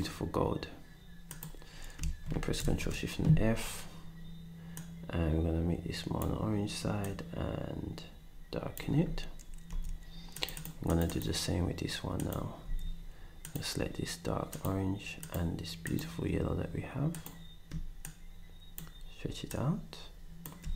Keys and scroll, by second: 2.6 ctrl+shift+f, 9.7 s, 12.6 d, 20.6 s.